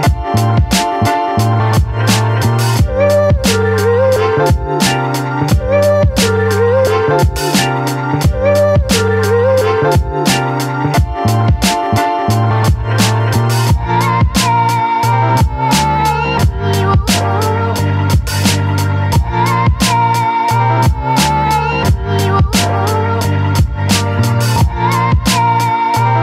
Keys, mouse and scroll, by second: 0.0-2.7 typing, 3.9 shift+y, 5.6-8.9 typing, 10.9-24.2 drag.